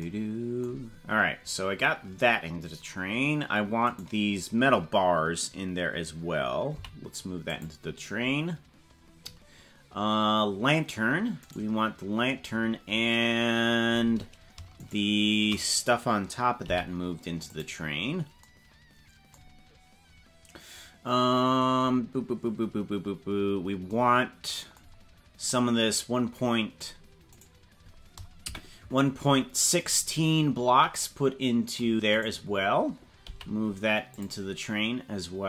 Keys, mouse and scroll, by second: 2.9 scroll down 3, 4.0 right click, 6.8 m, 11.6 right click, 12.4-12.8 scroll up 5, 14.8 shift+right click, 16.6 m, 23.1 scroll down 4, 24.9-25.2 scroll down 2, 27.4 right click, 28.4 KP_Decimal, 29.9 scroll down 5, 32.2 right click, 33.2 m.